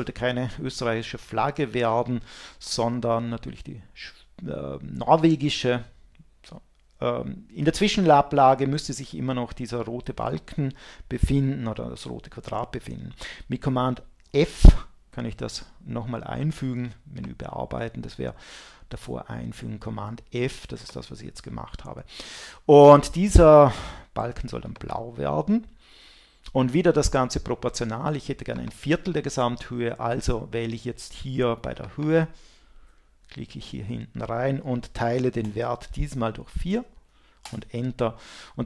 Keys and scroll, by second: 14.3 super+f, 37.4 Return.